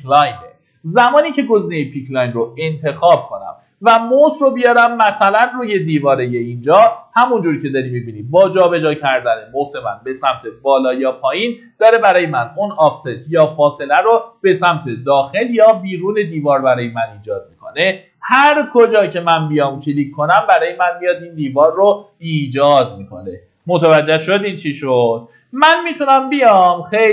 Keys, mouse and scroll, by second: 3.1-3.8 scroll up 1, 4.5-5.9 middle drag, 11.5-12.1 scroll up 1, 16.9-17.4 scroll down 1, 17.5 middle click, 17.9-19.5 scroll down 1, 19.9 click, 23.3 ctrl+z, 26.8-27.1 drag.